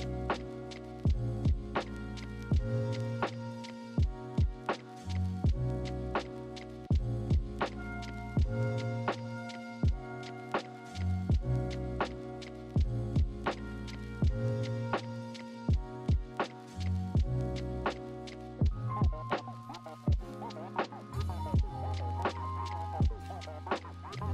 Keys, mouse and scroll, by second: 2.1 ctrl+=, 2.2 ctrl+-, 7.1 ctrl+=, 10.3 ctrl+-, 10.4 ctrl+=, 13.3 ctrl+-, 22.6 ctrl+-.